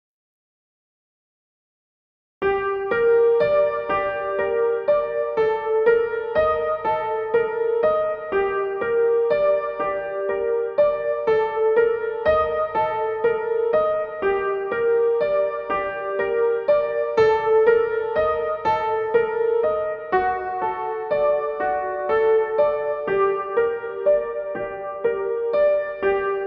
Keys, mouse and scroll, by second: 3.4-25.0 drag.